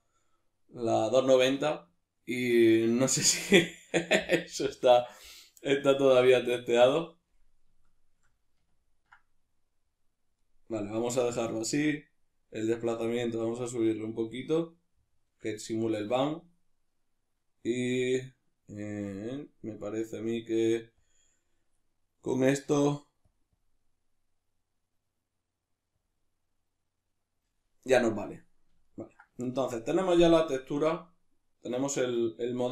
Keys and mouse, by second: 7.3-13.0 middle drag, 13.0-18.4 drag, 18.4-21.0 middle drag, 21.0 click, 23.2-28.9 drag, 28.9-32.7 ctrl+middle drag.